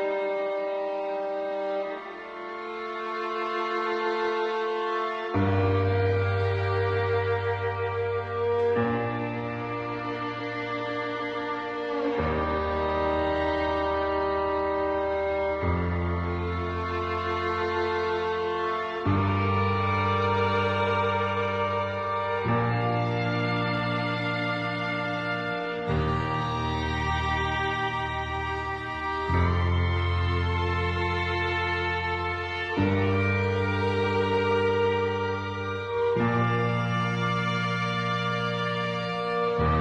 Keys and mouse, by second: 1.8 shift+middle click, 4.5 shift+middle click, 4.8-6.7 middle drag, 7.8 shift+middle click, 8.1 middle click, 11.8 click, 11.9-14.3 drag, 14.7 click, 15.3-17.0 drag, 17.2 middle click, 18.6 g, 27.5 shift+middle click, 28.2 click, 29.2-30.2 drag, 30.8-32.5 drag, 33.1-34.3 drag, 35.0 click, 35.8 click, 36.1-37.4 drag, 39.0-39.8 drag.